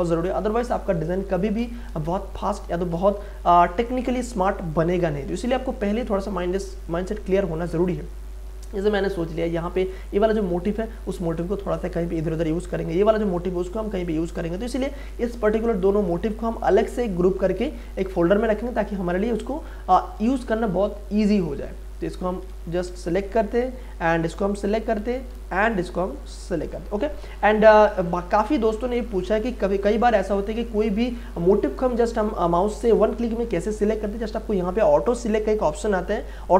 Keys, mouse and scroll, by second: 2.1 ctrl+space, 2.4 ctrl+click, 2.6 ctrl+space, 18.2 ctrl+space, 18.4 ctrl+click, 18.8 ctrl+space, 19.5 click, 19.6 click, 19.7 space, 21.5 click, 22.5 ctrl+z, 24.0 shift+click, 25.0 ctrl+z, 26.5 shift+click.